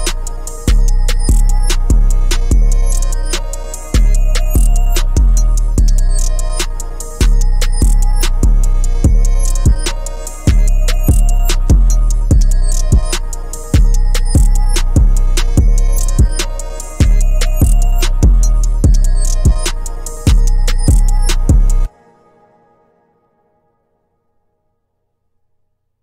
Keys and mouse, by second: 2.4 click, 25.1-26.0 drag.